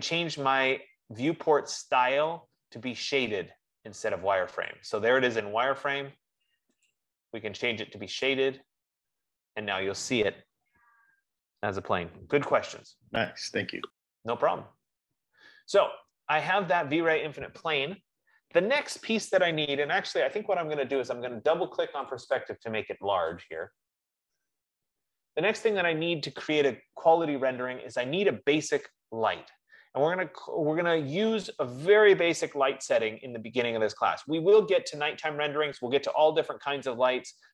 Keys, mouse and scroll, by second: 5.0-6.5 drag, 6.7 F15, 7.1 click, 8.7 click, 12.5-13.5 drag, 22.4 click, 23.8-24.5 scroll, 24.5 scroll down 2, 25.5-26.5 scroll.